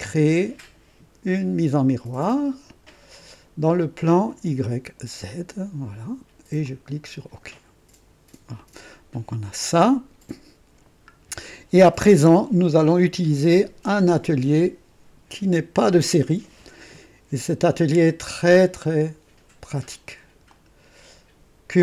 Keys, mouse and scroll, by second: 2.2 click, 3.6 click, 5.2 click, 6.6 click, 8.6-9.6 drag, 9.8 scroll up 2, 10.3-11.0 right drag, 11.1 scroll down 1, 12.1 KP_0, 12.9-13.3 scroll up 1, 13.5-14.3 right drag.